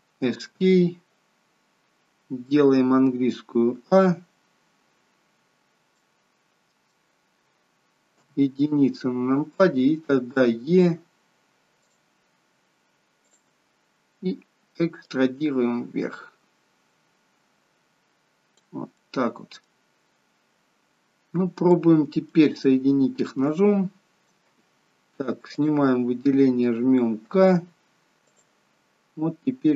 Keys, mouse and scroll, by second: 1.0-1.4 scroll down 2, 3.6 a, 5.9 middle click, 7.1 scroll down 2, 8.0 KP_1, 10.4 e, 13.2 click, 15.0 click, 18.9 middle click, 20.0-20.5 scroll up 6, 21.6 middle click, 22.6 shift+middle click, 25.5 click, 27.2 k.